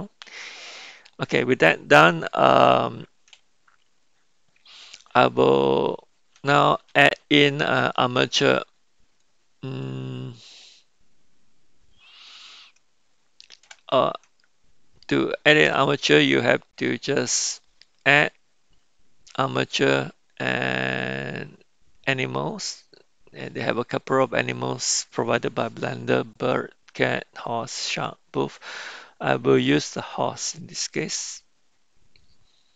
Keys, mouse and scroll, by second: 17.8-31.3 drag.